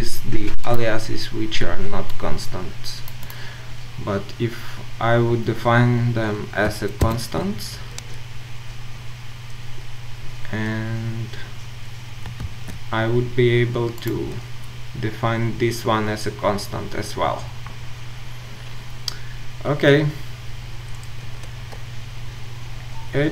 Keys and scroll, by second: 12.4 ctrl+z.